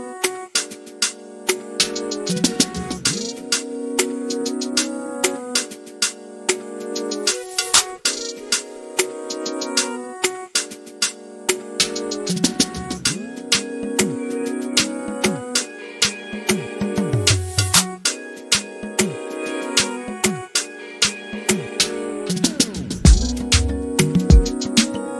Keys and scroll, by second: 0.8 q, 2.1-3.5 typing, 5.2-6.9 typing, 19.8 p, 23.7-24.5 typing.